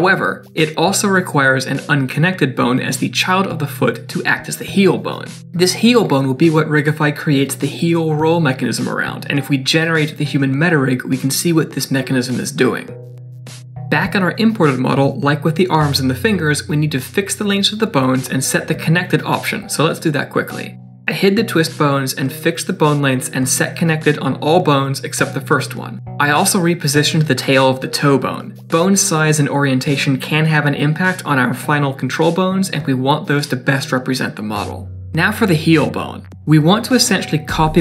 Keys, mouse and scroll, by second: 35.1 middle click.